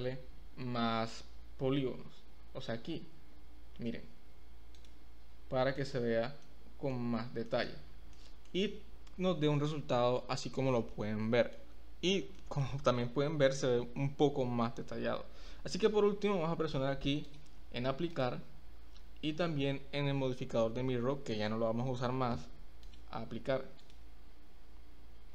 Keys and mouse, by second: 4.7 click, 5.8 click, 6.4-6.9 middle drag, 7.5 middle click, 8.1 middle click, 9.6-10.2 middle drag, 10.7-11.5 middle drag, 12.4 middle drag, 17.3-18.4 drag, 22.8-24.1 drag.